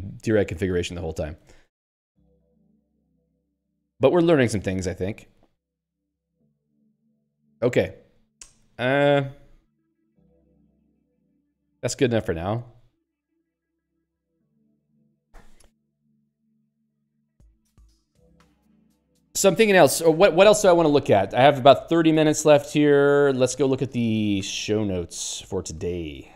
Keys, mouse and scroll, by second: 1.7 ctrl+n, 4.1 ctrl+s, 4.3 ctrl+n, 6.7 ctrl+p, 10.0 ctrl+s, 10.7 ctrl+p, 11.4 ctrl+n, 13.6 ctrl+p, 14.0 ctrl+s, 23.2 ctrl+g, 23.4 ctrl+s, 24.8 g, 25.6 ctrl+n.